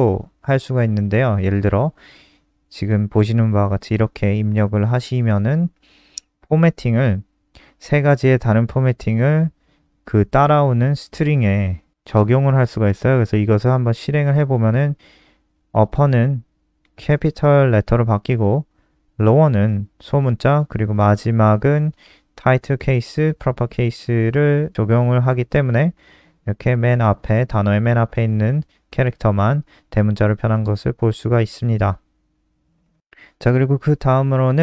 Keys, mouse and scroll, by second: 0.0 shift+Up, 0.5 ctrl+c, 1.5 click, 2.6 ctrl+v, 3.2 click, 11.8 click, 12.2 click, 13.1 click, 13.3 ctrl+s, 14.7 click, 15.6 click, 15.9 click, 31.8 click, 33.8-34.3 scroll down 1, 34.3 click, 34.5 scroll down 2.